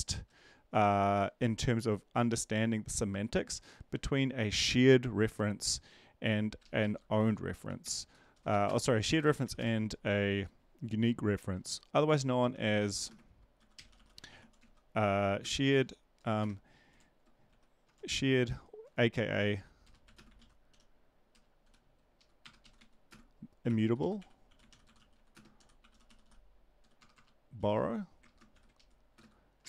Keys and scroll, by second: 6.6 ctrl+Left, 6.8 ctrl+Left, 7.6 Down, 7.8 End, 8.1 Return, 8.5-9.5 typing, 12.5-15.1 typing, 16.4 space, 20.7-27.6 typing, 22.6 Right, 28.5 ctrl+shift+Left, 28.5 ctrl+x, 29.1 space.